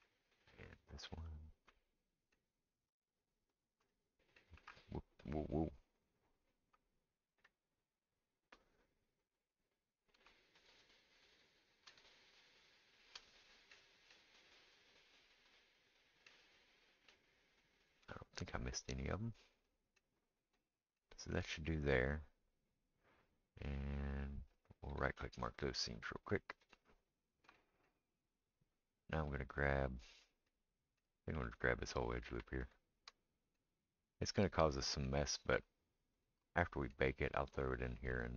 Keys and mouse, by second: 0.7 shift+click, 1.2 shift+click, 3.0 shift+click, 3.0-4.8 shift+middle drag, 7.4 middle click, 7.4-13.0 right drag, 10.7 shift+click, 13.0-15.1 shift+middle drag, 15.1-30.7 right drag, 28.2-30.0 middle drag, 29.3 click, 30.7 middle click, 31.3-38.3 alt+right drag, 31.4 alt+click, 31.4 alt+middle click, 34.2 shift+click, 34.2 shift+middle click, 36.1 shift+click, 36.1 shift+middle click, 37.2-38.3 shift+middle drag, 37.5 shift+click.